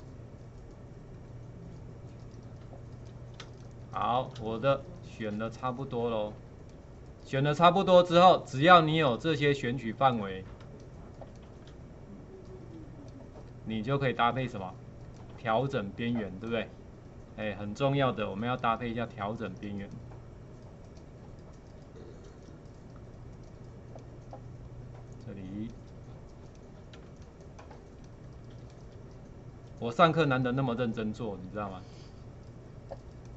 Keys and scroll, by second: 3.4 space, 10.7 space, 27.0 space.